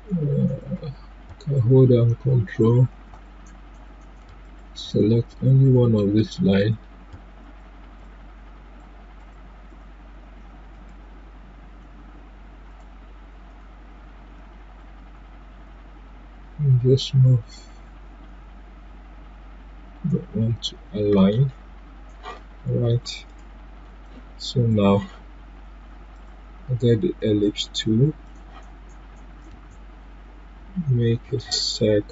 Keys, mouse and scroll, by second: 1.5 click, 10.7 right click, 12.7-22.7 drag, 22.8 click, 23.2 right click.